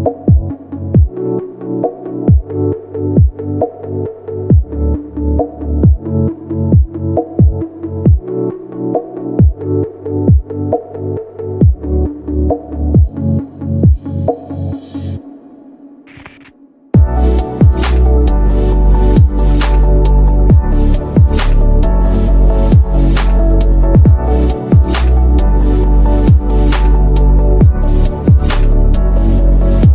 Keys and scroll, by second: 8.5 F3, 10.7 ctrl+z, 11.2 shift+F2, 11.5 Escape, 20.9 shift+F2, 21.3 F3.